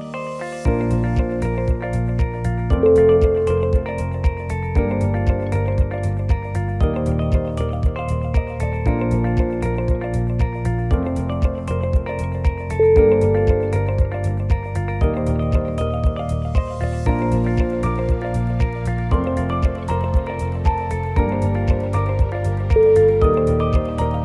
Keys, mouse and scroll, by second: 0.4 click, 0.8 g, 2.8 click, 3.2 g, 5.9 ctrl+r, 7.1 click, 7.5 g, 8.6 click, 8.9 click, 9.7 click, 9.7 scroll up 2, 10.1 g, 11.4 scroll down 2, 11.6 middle click, 13.3-13.8 scroll down 1, 13.3 l, 13.8 middle click, 13.8 g, 14.6 click, 14.9 g, 16.4 click, 16.7 middle click, 16.7 middle click, 17.1 middle click, 17.3 shift+z, 17.5-18.2 scroll up 1, 18.3 r, 20.1 g, 23.5 scroll down 1, 23.6 scroll up 1, 23.8 g.